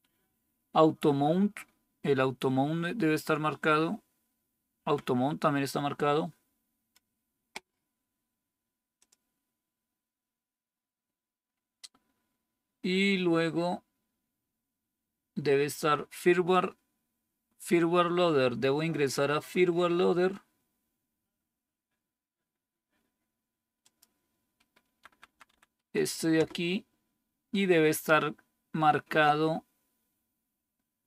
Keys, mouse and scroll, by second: 4.7 Down, 24.9 Down, 25.0 Down, 25.2 Down, 25.4 Down, 26.3 Return.